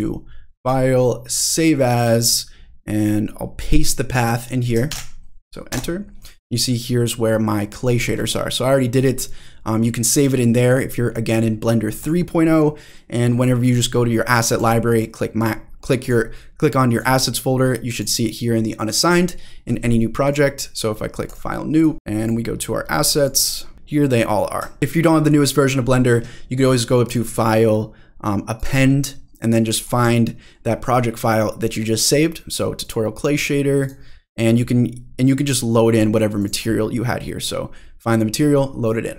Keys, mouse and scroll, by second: 0.6-1.7 drag, 14.6-15.4 drag, 16.0-17.0 drag, 17.9 click, 20.2-21.8 drag, 22.4 click, 23.1 click, 23.7 scroll down 1, 24.8 middle click, 24.8-26.3 scroll up 1, 27.1-28.8 drag.